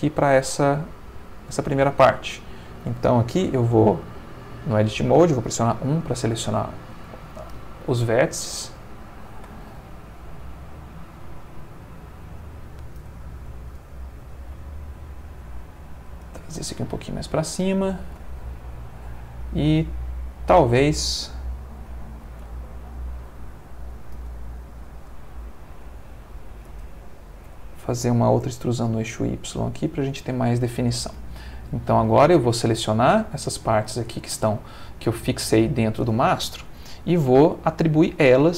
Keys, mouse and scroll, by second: 2.2 click, 5.7 1, 8.6-12.3 drag, 13.7 g, 14.2 z, 16.2 shift+space, 17.5-20.6 drag, 22.5 ctrl+middle click, 24.2 g, 25.7 y, 26.7 space, 27.5 e, 28.4 y, 29.8 space, 30.6 ctrl+middle click, 31.6-33.4 ctrl+drag, 34.0 shift+middle click, 35.2 ctrl+middle click.